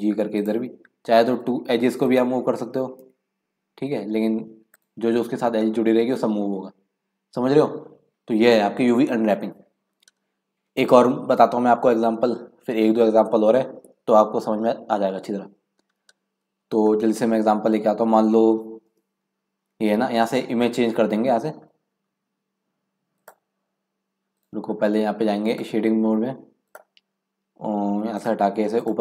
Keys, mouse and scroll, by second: 1.3 2, 2.1 click, 3.1 g, 5.3-5.6 scroll down 5, 5.6 scroll up 1, 6.3-7.0 scroll up 2, 7.0-8.1 scroll up 1, 16.3 Tab, 16.6 scroll down 1, 16.9-17.3 middle drag, 17.3 scroll down 1, 17.4-18.6 scroll up 2, 18.6 scroll up 1, 18.9 Tab, 23.2 click, 25.5-29.0 drag.